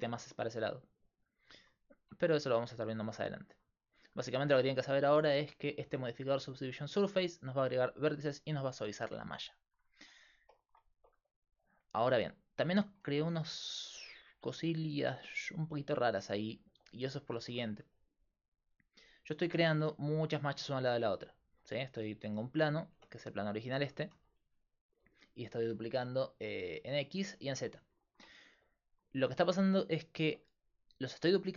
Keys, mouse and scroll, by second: 2.0 Tab, 2.0 click, 2.5 z, 3.1 right click, 3.3 click, 7.8-9.6 drag, 9.0 x, 11.4-13.3 right drag, 13.3-17.4 middle drag, 18.8-20.8 drag, 20.8-23.0 right drag, 23.0 Tab, 23.8 a, 24.1 a, 24.9 a, 28.5-29.9 middle drag, 30.2 middle click.